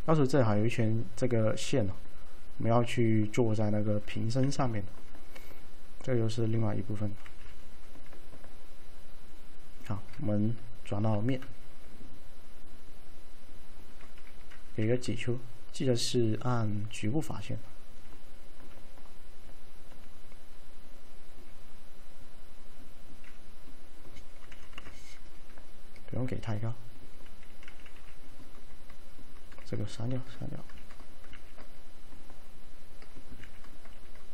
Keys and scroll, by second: 4.5 f, 7.3 l, 11.2 alt+4, 14.9 alt+q, 24.6 5, 24.8 Return, 28.0 2, 29.6 ctrl+x, 30.3 ctrl+x.